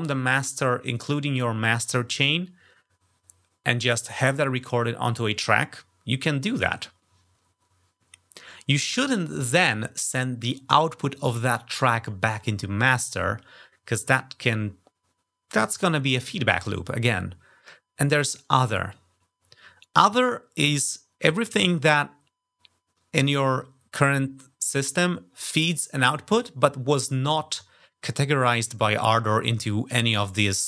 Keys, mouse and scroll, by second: 18.2 click.